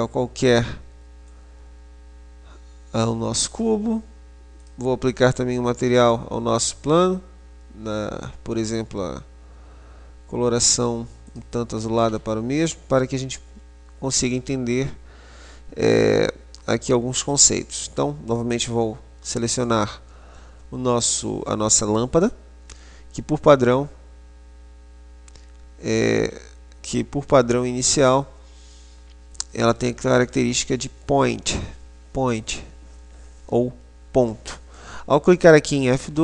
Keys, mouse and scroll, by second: 1.4 click, 3.6 right click, 4.8-7.9 drag, 13.4-16.8 middle drag, 18.6 right click.